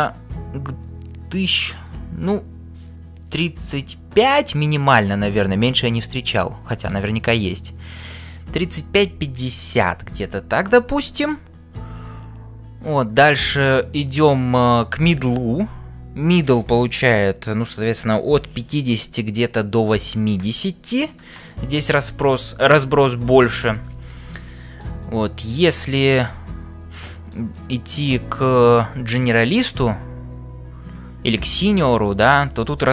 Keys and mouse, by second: 24.4 shift+middle click, 25.0 middle click, 25.6 click, 26.2-27.4 middle drag, 31.7-32.7 middle drag.